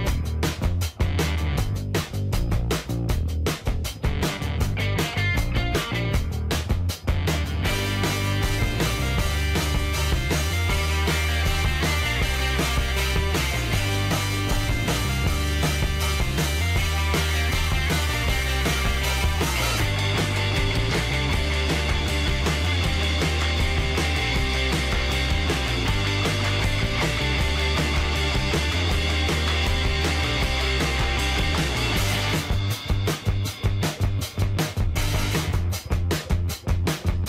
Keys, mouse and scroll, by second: 16.1-16.8 typing, 22.8 click, 23.6 middle click, 23.9-24.2 scroll up 1.